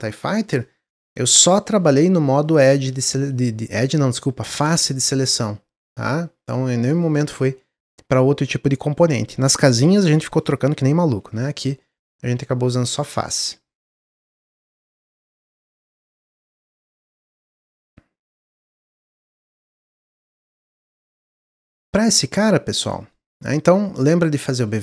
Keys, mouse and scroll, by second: 14.4 middle click, 15.2 scroll down 1, 15.5 shift+middle click, 16.3 Tab, 16.6-18.3 middle drag, 18.3-19.1 scroll down 2, 19.1 click, 19.7 click, 20.1 click, 21.3-22.1 middle drag, 22.1-23.3 scroll up 1, 23.5-23.9 drag, 24.3-24.8 drag.